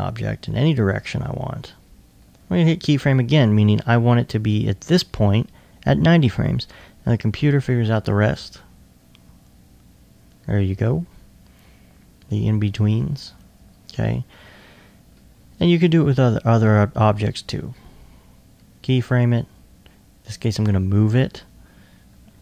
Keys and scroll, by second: 19.1 e.